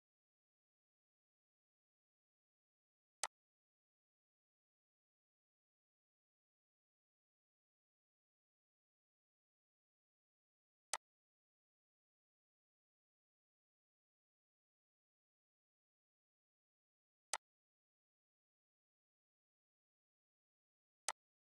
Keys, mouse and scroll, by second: 3.2-10.9 drag, 13.0 click, 13.4 typing, 17.3-21.0 drag, 17.3 typing.